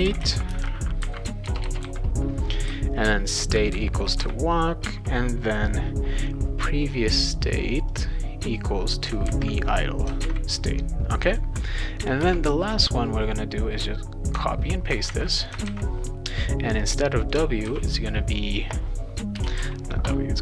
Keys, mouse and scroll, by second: 0.0-1.8 typing, 4.8 space, 7.9-9.0 drag, 9.3 ctrl+c, 10.0 click, 10.2 ctrl+v, 11.3 click, 12.2 Return, 12.6-14.9 drag, 15.0 ctrl+c, 15.4 click, 15.7 ctrl+v, 16.8 click, 17.6 shift+w, 19.4 BackSpace, 19.5 shift+s.